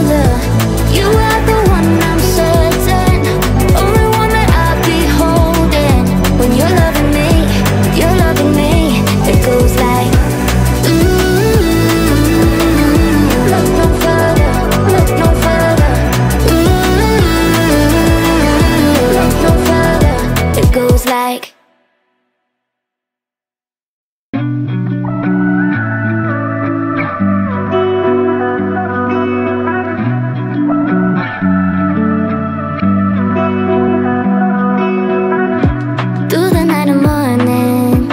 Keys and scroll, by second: 5.9 Up, 8.5 Down, 10.6 Delete, 12.1 space.